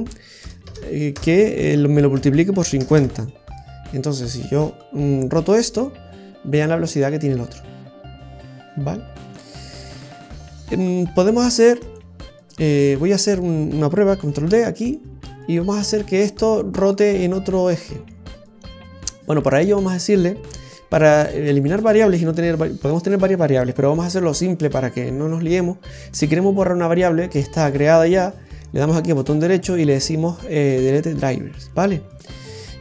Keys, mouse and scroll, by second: 0.6 BackSpace, 4.5 right click, 5.4 r, 12.4-12.7 scroll down 1, 13.1 right click, 14.2 shift+d, 17.4 right click, 19.3 right click, 28.3 right click.